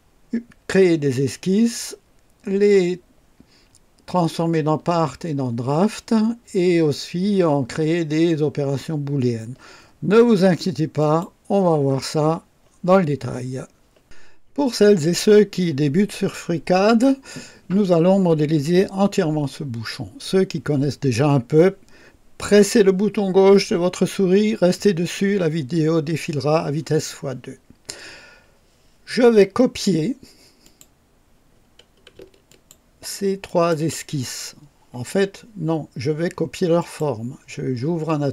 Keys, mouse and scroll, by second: 11.0 click, 30.6 click, 32.5 ctrl+click, 33.4 ctrl+click, 36.8 click.